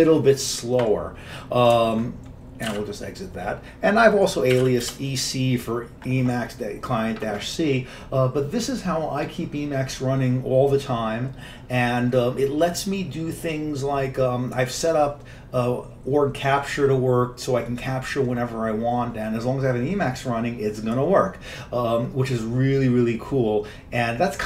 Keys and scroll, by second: 2.7 ctrl+x, 2.9 ctrl+c, 4.4-5.2 typing.